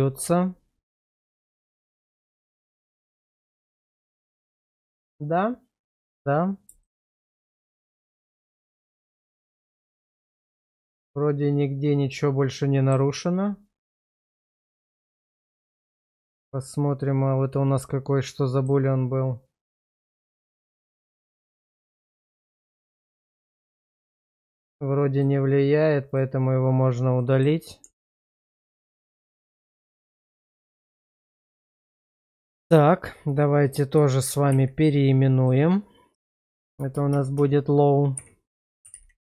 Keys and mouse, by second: 3.0 middle click, 3.7 Tab, 4.3 middle click, 6.0 click, 6.8 shift+middle click, 7.2-12.9 middle drag, 14.2 click, 16.2 shift+middle click, 16.5-18.7 middle drag, 19.7 click, 22.1 click, 22.8 click, 23.5 click, 24.0 click, 24.6 click, 25.2 click, 26.1 click, 27.2 middle click, 27.8 Tab, 28.6 Tab, 29.3 middle click, 30.1 /, 31.3-31.9 middle drag, 32.1 shift+middle click, 34.5 shift+r, 36.3-37.3 typing.